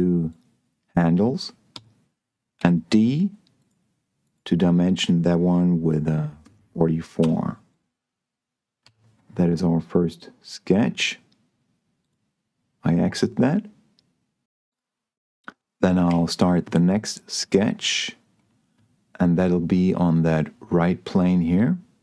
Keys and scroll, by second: 2.0 Escape, 2.5 d, 6.7 4, 7.1 Return, 9.1 Escape, 16.4 s.